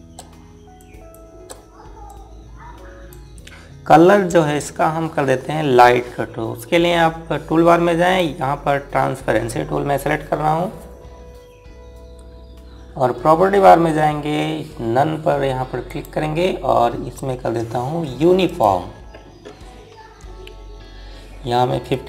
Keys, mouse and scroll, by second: 1.3 shift+click, 2.6 click, 11.7 click, 19.0 click.